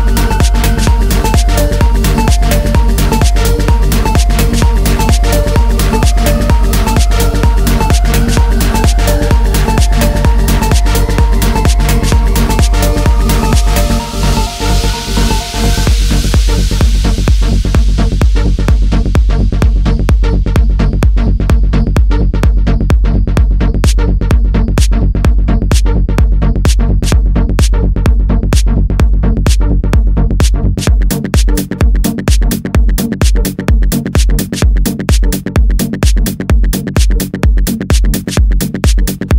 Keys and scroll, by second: 4.6 ctrl+c, 4.7 ctrl+v, 5.1 ctrl+z, 6.0 ctrl+c, 6.1 ctrl+v, 6.5 ctrl+z, 7.6 F9, 22.1 space, 22.8 ctrl++, 24.1 ctrl+z, 28.9 ctrl+z, 34.0 ctrl++.